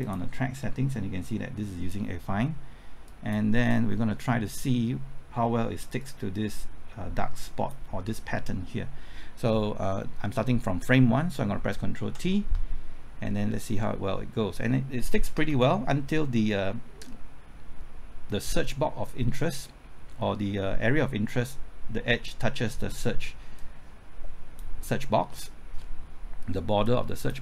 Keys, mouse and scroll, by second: 12.2 ctrl+t, 15.5 Left, 23.5-24.6 drag.